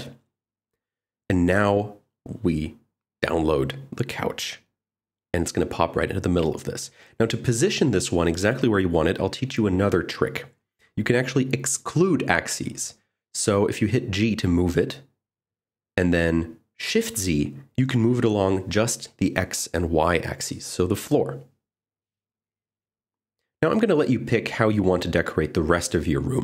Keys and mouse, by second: 1.5-2.5 drag, 6.3 click, 11.6 click, 14.4 g, 15.5 shift+z, 22.1 click, 22.6-26.4 typing, 22.8 Tab, 22.8 click, 23.3 click, 23.5 click, 23.7 Tab, 23.7 click, 24.3 Tab, 24.3 click, 24.6 click, 25.0 click, 25.3 click, 25.6 click, 25.9 click, 26.1 click.